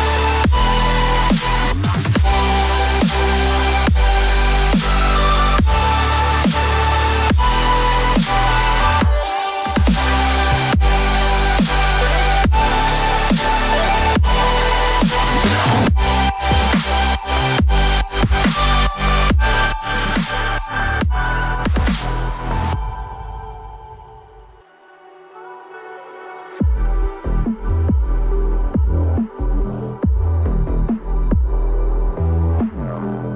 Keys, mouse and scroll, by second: 1.4 double click, 6.5-7.1 typing, 9.8-10.7 typing, 12.9-13.7 typing, 18.1 right click, 19.9 double click, 20.3 right click, 22.5 ctrl+z, 23.3 double click, 24.5-25.2 ctrl+scroll down 1, 25.3-26.2 scroll down 1, 26.9 ctrl+click, 31.0 right click.